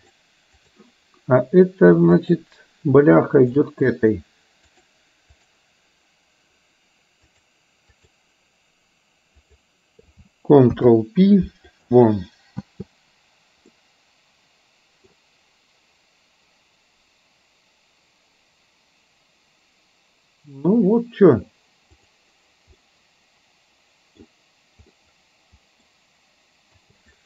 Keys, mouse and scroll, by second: 0.0-0.8 drag, 4.8 click, 7.3-8.1 drag, 9.5 click, 11.7 ctrl+p, 13.8-15.1 middle drag, 13.8 space, 22.0 click, 22.9-24.3 middle drag, 25.0-25.9 middle drag, 27.0 space.